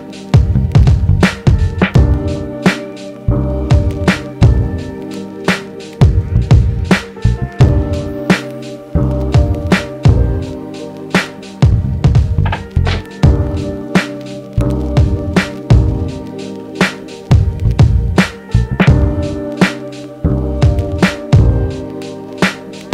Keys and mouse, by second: 3.4 f, 4.0 alt+middle click, 4.6-20.1 drag, 18.7 ctrl+Tab, 20.5 shift+click, 21.5 ctrl+j.